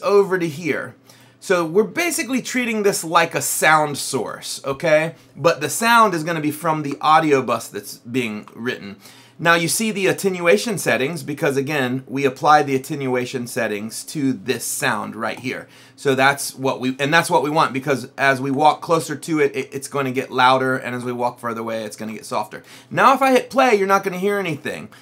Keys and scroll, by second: 5.7 Down, 6.8 Up, 8.4 Up, 18.3 Down, 19.5 Up, 20.7 Down, 22.0 Up.